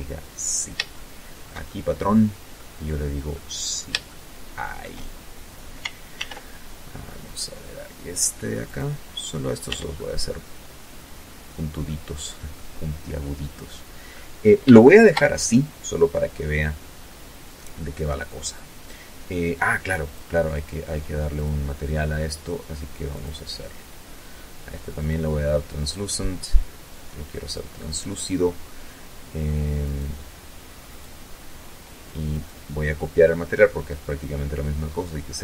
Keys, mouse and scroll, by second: 0.3 shift+middle click, 1.2-1.8 scroll up 2, 1.8-3.5 middle drag, 3.5 shift+scroll down 2, 4.6 ctrl+r, 5.8 click, 7.2 click, 7.7-8.2 scroll down 2, 8.2 Tab, 8.4-9.6 middle drag, 9.7 scroll down 1, 10.3 middle click, 12.2-12.6 scroll down 1, 12.6 scroll up 1, 13.2-14.3 shift+middle drag, 18.5 click, 19.8 click, 21.6 click, 23.4 click, 25.9 click, 28.3 right click, 29.3 right click, 30.8 right click.